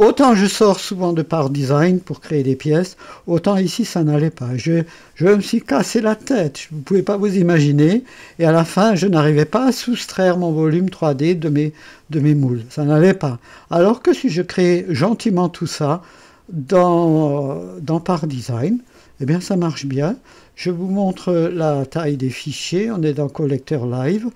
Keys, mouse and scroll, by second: 19.2 ctrl+s, 20.6 click.